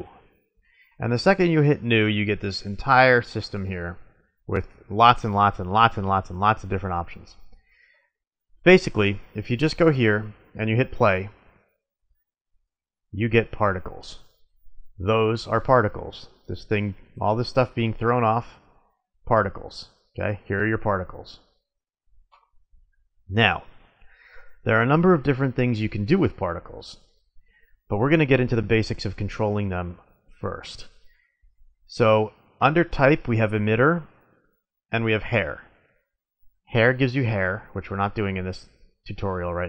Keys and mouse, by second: 5.7-11.7 drag, 13.3 middle click, 17.8 drag, 21.7-22.1 middle drag, 22.7-24.5 drag, 24.5-27.1 middle drag, 27.6-29.4 drag, 29.4-32.4 middle drag, 34.3-36.3 drag, 36.3-38.2 middle drag.